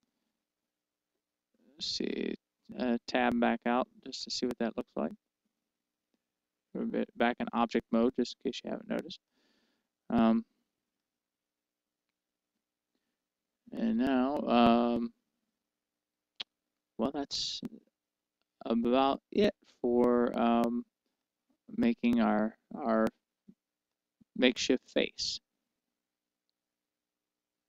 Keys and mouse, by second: 0.0-2.5 middle drag, 3.9 Tab, 5.1-7.0 middle drag, 10.8 click, 11.9-18.5 middle drag, 18.5 Tab, 21.4 Tab, 22.4-24.1 middle drag, 25.1-27.3 middle drag.